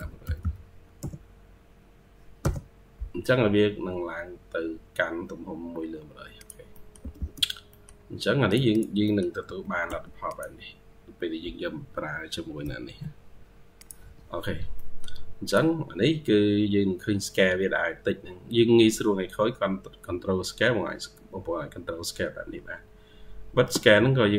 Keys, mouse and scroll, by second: 0.0-0.8 typing, 2.3 Return, 3.1-4.4 scroll down 12, 4.4 scroll up 2, 6.5 scroll up 4, 6.6 middle click, 6.8 e, 7.3 scroll down 1, 8.9 middle click, 9.3 typing, 14.6 middle click, 17.4-18.4 scroll up 2, 23.8 ctrl+q, 24.3 ctrl+click.